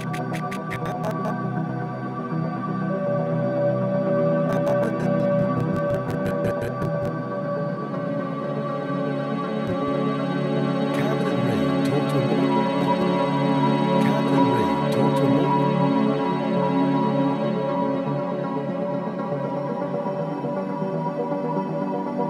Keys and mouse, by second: 1.0-2.1 typing, 3.5-4.2 typing, 3.5 click, 7.0 click, 7.6-8.3 typing, 8.6-10.5 drag, 9.9-10.6 typing, 11.9-13.2 typing, 12.7 click, 15.3 typing, 16.7 ctrl+alt+click, 18.0-18.9 drag, 19.4-20.4 drag, 20.8-21.7 drag, 22.1 click.